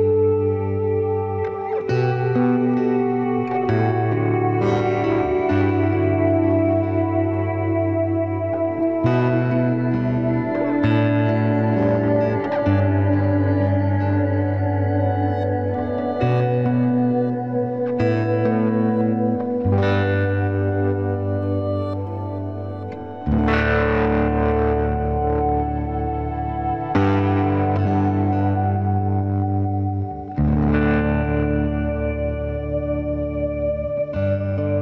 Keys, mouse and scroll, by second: 0.2 g, 3.0 ctrl+r, 6.9 ctrl+r, 9.4-11.2 drag, 9.7 c, 11.2 e, 12.7 KP_Decimal, 15.0-16.2 middle drag, 16.2-19.6 right drag, 16.4 b, 16.8 g, 18.3 b, 18.7 g, 19.7 ctrl+r, 22.7-27.9 right drag, 23.2 b, 23.5 g, 24.9 b, 25.3 g, 26.4 b, 26.9 g, 29.2 KP_Decimal, 30.0 click, 30.2 b, 30.5-31.6 middle drag, 30.6 g, 31.6 click, 31.8 b, 32.3 g, 33.4 b, 33.8 g.